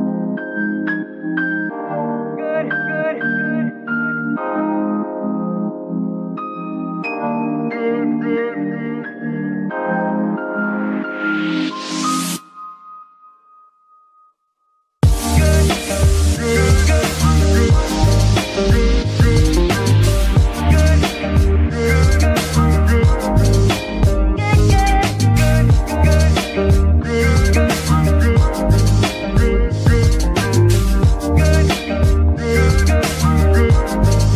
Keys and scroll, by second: 0.0-4.1 typing, 0.2 Escape, 6.9 r, 7.5 g, 7.6 r, 8.1 z, 9.4 z, 10.0 g, 10.7 r, 12.5 g, 12.5 r, 13.1 g, 14.5 Escape, 15.2 g, 19.6 alt+g, 21.2 Escape, 22.3 KP_0, 22.4 KP_Decimal, 22.6 KP_5, 22.7 Return, 23.3 g, 24.2 Escape, 25.3 g, 26.3 Escape, 27.3 KP_0, 27.5 KP_Decimal, 27.5 KP_5, 27.6 Return, 30.1 g, 30.4 x, 34.0 shift+r.